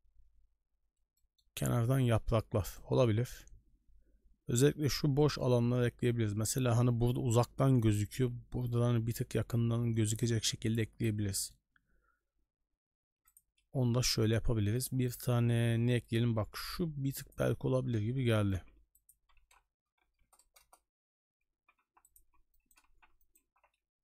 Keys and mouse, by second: 1.1 shift+middle click, 2.0 shift+middle drag, 2.7 right click, 5.2 shift+middle drag, 11.3 middle click, 13.5 n, 14.2-17.6 drag, 19.2 r, 20.6 KP_0, 21.6 g, 22.2 s, 22.9 z, 23.6 ctrl+z.